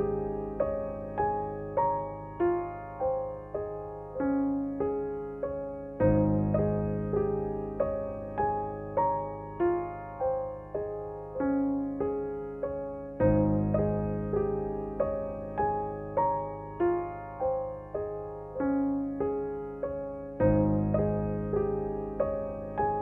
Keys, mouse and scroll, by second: 0.0 space, 0.7 click, 0.8 space, 2.0-9.7 drag, 9.7 ctrl+z, 10.7 space, 10.9 click, 11.2 space, 11.6-15.7 drag, 16.7 space, 17.0 click, 17.3 space, 18.2 click, 18.4 space, 19.4 click.